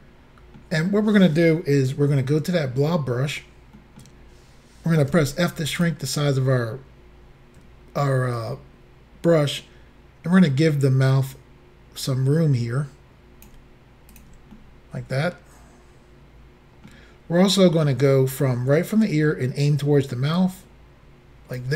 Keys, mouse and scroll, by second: 0.0 middle click, 3.8 middle click, 5.2 f, 5.8 click, 8.4 ctrl+click, 14.2 ctrl+click, 14.6 middle click, 20.4 ctrl+click.